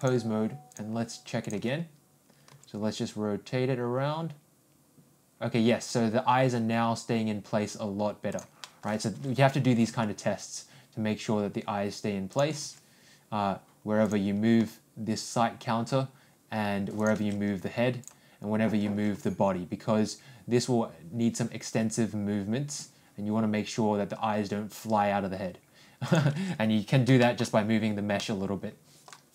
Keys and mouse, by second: 0.0 click, 2.5 r, 8.6 middle click, 9.6 ctrl+r, 14.6 ctrl+g, 19.2 ctrl+r, 27.2 ctrl+shift+middle click, 28.1 ctrl+middle click.